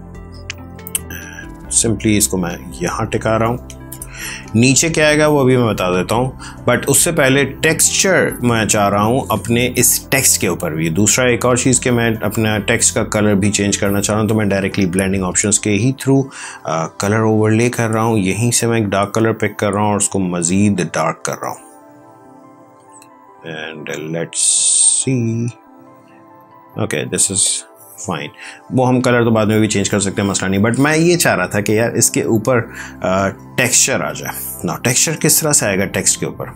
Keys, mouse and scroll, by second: 7.3 click, 12.0 right click, 13.4 click, 16.4 click, 32.1 click, 32.6 ctrl+1, 33.2 space, 33.5 click, 33.8 space, 34.0 click, 34.1 space.